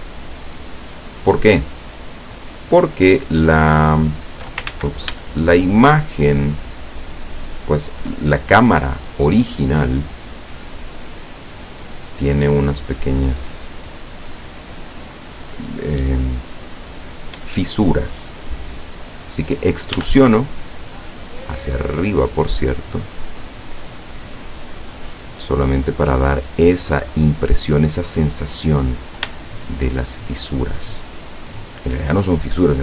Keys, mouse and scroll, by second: 0.2 shift+right click, 1.0 shift+right click, 1.7 shift+right click, 2.1 shift+middle click, 3.7 shift+right click, 3.8 shift+scroll up 1, 4.8 ctrl+shift+z, 5.6 shift+right click, 6.8 shift+right click, 7.7 shift+right click, 8.5-9.7 shift+scroll down 3, 9.7-12.9 middle drag, 20.0 e, 27.6 click, 28.6-29.1 scroll up 2, 29.6-30.5 shift+middle drag.